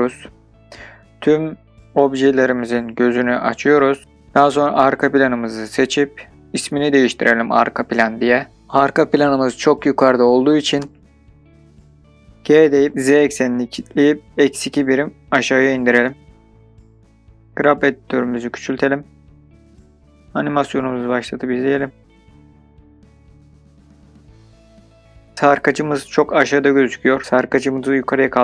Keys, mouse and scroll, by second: 14.8 KP_2, 15.3 KP_Enter, 17.3 middle click, 17.6-18.9 drag, 19.7-20.3 scroll up 2, 20.6-23.3 drag, 23.3 middle click, 23.3 space, 24.1-24.7 drag, 27.4 space.